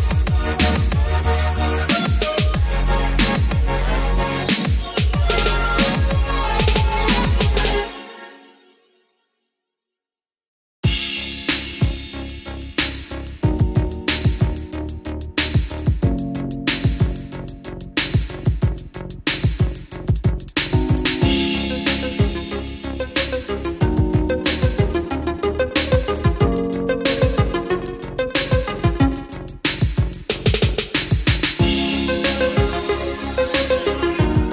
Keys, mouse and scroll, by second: 8.8 Escape, 9.5-10.0 scroll up 1, 10.0-10.6 scroll down 1, 11.7-22.9 drag, 23.4-26.1 scroll down 1, 27.4 click, 28.7-30.0 scroll up 1, 30.7 scroll down 1, 31.8-34.5 drag.